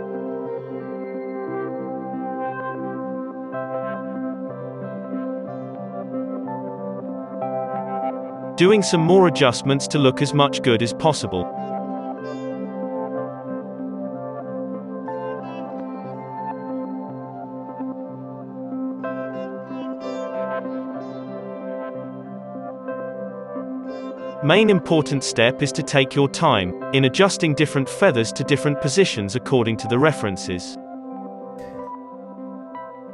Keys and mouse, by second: 2.1-5.0 drag, 5.0 middle click, 5.2-7.3 drag, 6.0 z, 7.3-9.0 middle drag, 7.6 shift+d, 10.5 ctrl+z, 11.8 KP_Divide, 12.7 alt+a, 12.7 z, 12.9 z, 13.2 KP_3, 13.4 KP_Divide, 13.6 g, 14.8 g, 15.2 r, 15.6 g, 18.2-33.1 typing, 25.1 Tab, 25.8 click, 26.2-28.6 drag, 27.6 Tab, 27.7 alt+a.